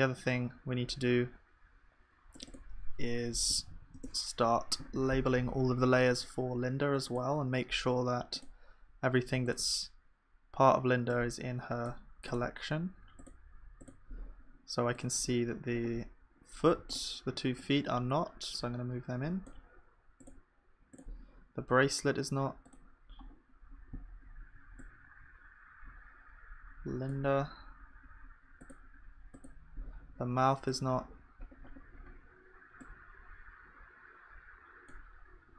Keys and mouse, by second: 10.9-21.6 drag, 16.3-20.2 right drag, 29.3-35.5 drag, 32.3-35.5 right drag.